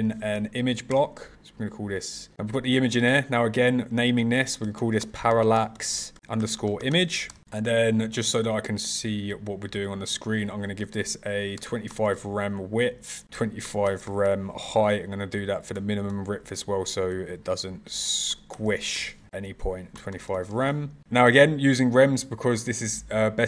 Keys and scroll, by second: 6.1 shift+-.